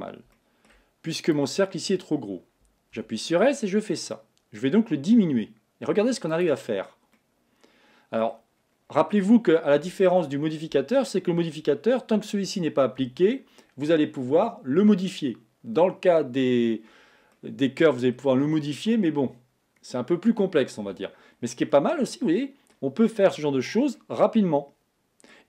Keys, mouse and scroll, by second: 0.4 shift+middle click, 1.3 click, 1.9 scroll up 2, 3.2 s, 7.3-8.6 middle drag, 8.6-9.2 scroll down 3, 9.2-12.2 middle drag, 17.5-20.4 middle drag, 21.8-23.1 middle drag, 23.1-23.6 scroll up 3, 23.6-24.0 scroll down 1, 24.0-25.4 middle drag.